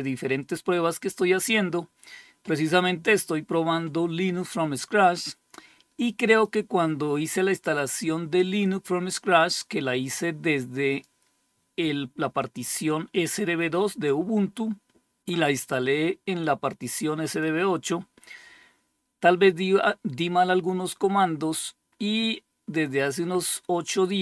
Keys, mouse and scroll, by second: 5.7 click, 8.0-10.4 drag, 11.8-13.5 drag, 15.8-16.9 drag.